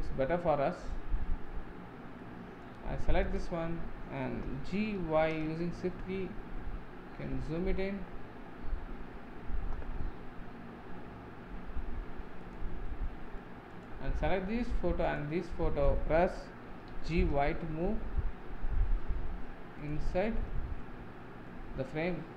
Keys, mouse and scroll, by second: 1.6-2.3 middle drag, 2.8 click, 3.4 click, 4.8 g, 12.9-13.8 middle drag, 13.8 click, 14.2-15.2 middle drag, 15.2 shift+click, 16.8 g, 20.1-21.3 middle drag, 21.3 scroll down 1, 21.5-22.3 middle drag.